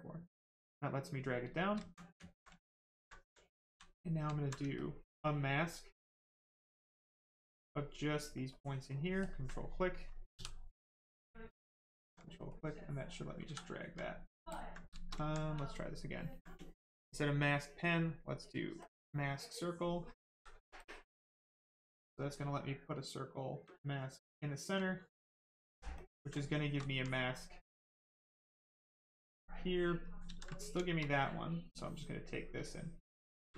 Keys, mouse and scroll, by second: 1.2 right click, 2.2 alt+right click, 2.5 ctrl+right click, 3.1 alt+right click, 3.7 click, 4.2 alt+click, 4.7 ctrl+click, 8.5 ctrl+click, 9.5 click, 9.6 right click, 11.7 alt+click, 12.5 click, 13.4 ctrl+z, 14.1 right click, 14.5 ctrl+click, 14.7 right click, 14.9 shift+right click, 15.2 alt+right click, 15.5 ctrl+right click, 19.7 ctrl+click, 20.3 ctrl+z, 20.7 ctrl+click, 24.9 right click, 25.9 ctrl+click, 26.3 right click, 26.9 alt+right click, 27.3 right click, 28.7 click, 29.4 right click, 30.2 ctrl+z, 30.5 right click, 31.7 ctrl+click.